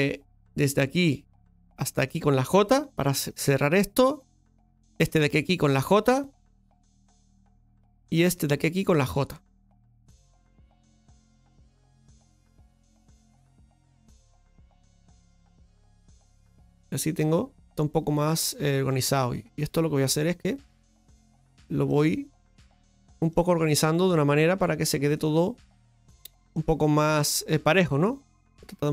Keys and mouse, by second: 0.6 right click, 1.2 right click, 1.9 shift+right click, 3.1 j, 4.9 right click, 5.7 shift+right click, 6.7 j, 8.3 right click, 9.0-10.4 right drag, 10.4 j, 14.0 right click, 18.8 right click, 20.8-21.9 right drag, 22.7 right click, 23.3 g, 24.0-25.0 right drag, 25.6 right click, 26.5 g, 27.0 right click, 28.0 g, 28.5 right click.